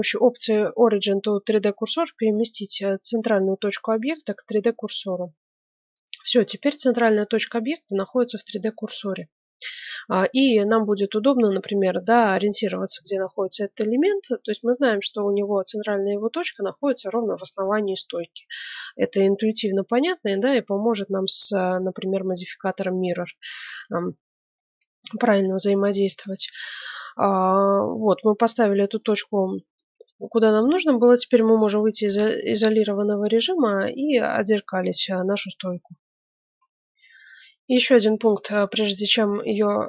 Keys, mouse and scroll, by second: 5.2-6.9 middle drag, 8.1-13.6 middle drag, 14.3-16.0 middle drag, 19.8-21.8 middle drag, 24.8-26.7 middle drag, 28.5-28.9 scroll down 1, 29.0-31.7 middle drag, 31.5 KP_Divide, 36.4 F9.